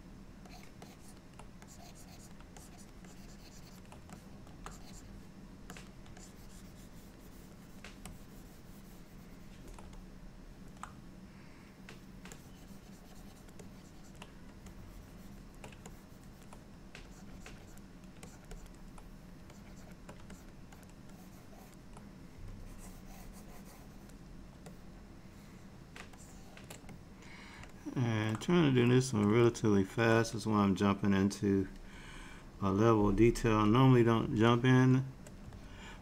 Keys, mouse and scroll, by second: 0.6 ctrl+click, 0.9 ctrl+click, 1.7 click, 2.6 ctrl+click, 3.1 ctrl+click, 4.2 middle click, 4.8 click, 5.8 click, 6.3 ctrl+click, 6.6 ctrl+click, 7.4 click, 7.7 click, 8.2 ctrl+click, 10.1 middle click, 12.4 ctrl+click, 13.7 ctrl+click, 14.9 shift+click, 15.2 shift+click, 16.0 ctrl+click, 17.2 click, 17.4 click, 17.6 shift+click, 17.7 click, 18.3 ctrl+click, 18.6 ctrl+click, 19.6 shift+click, 19.7 shift+click, 20.4 ctrl+click, 20.8 ctrl+click, 21.2 ctrl+click, 22.7 ctrl+click, 24.8 middle click, 26.2 shift+middle click, 27.0 middle click, 27.8 shift+middle click, 28.8 shift+click, 29.2 shift+click, 29.5 middle click, 34.6 shift+middle click, 35.7 ctrl+middle click.